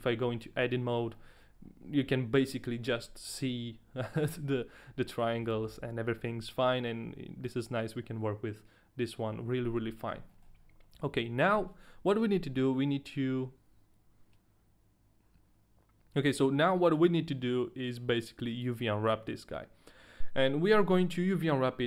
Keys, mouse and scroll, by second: 0.2 a, 0.8 scroll up 2, 1.1 middle click, 1.5-2.8 scroll up 1, 3.4 shift+middle click, 3.5-3.9 scroll down 1, 5.1 middle click, 5.7 shift+middle click, 5.7-6.4 scroll down 3, 10.5 shift+middle click, 11.2 middle click.